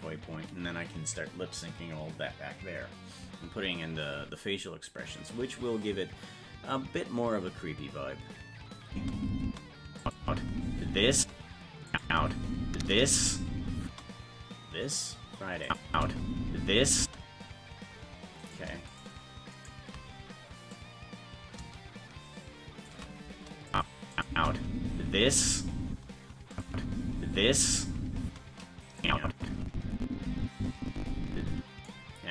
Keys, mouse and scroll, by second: 8.9 space, 10.0 click, 10.2 space, 11.9 click, 11.9 space, 12.0 space, 15.6 click, 15.9 space, 18.5 right click, 18.9-19.9 shift+right drag, 20.7-22.9 drag, 23.7 click, 24.1 click, 24.3 space, 26.5 click, 26.7 space, 29.0-31.9 drag, 29.0 space.